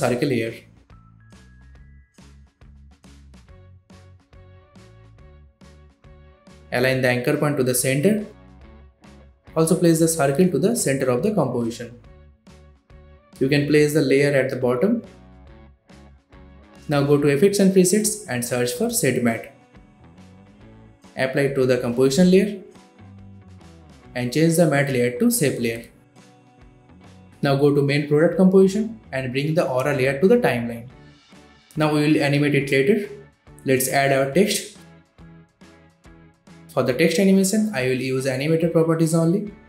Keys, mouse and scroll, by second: 6.8 v, 7.2 click, 9.6 alt+Home, 11.7 click, 11.7 click, 19.4-20.8 typing, 22.3-27.3 drag, 34.8-37.1 typing, 37.9 click.